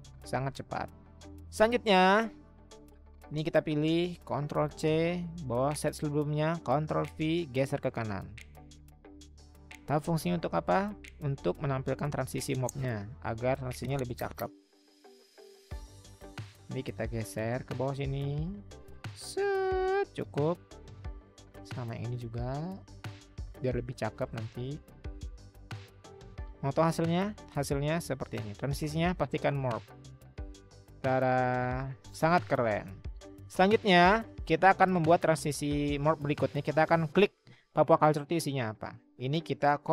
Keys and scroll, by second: 4.6 ctrl+c, 6.7 ctrl+v, 7.5-12.1 Right, 17.7-19.0 Right, 19.2 Right, 19.7 Right, 22.3-23.1 Right, 23.2 Right, 23.3 Right, 23.4 Right, 23.6 Right, 23.7 Right, 23.8 Right, 24.0 Right, 24.0-25.0 Right, 25.3-26.0 Right.